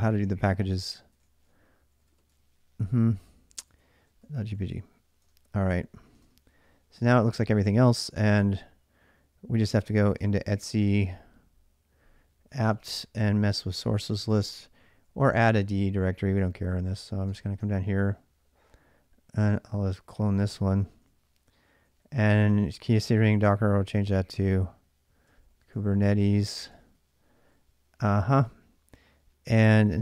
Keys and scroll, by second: 0.0-2.4 typing, 3.5 ctrl+a, 3.8-6.4 typing, 5.0 Return, 9.5-10.9 typing, 12.1-14.6 typing, 16.2 Return, 16.2 typing, 17.3-23.8 typing, 24.8-27.6 typing, 29.3 l, 29.5 l, 29.6 l.